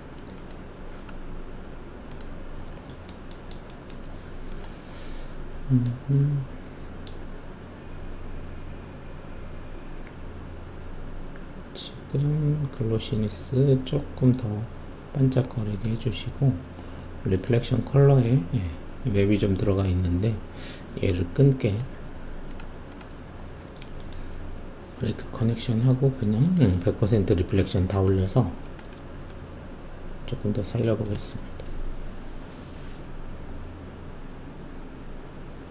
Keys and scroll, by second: 28.9 shift+F1.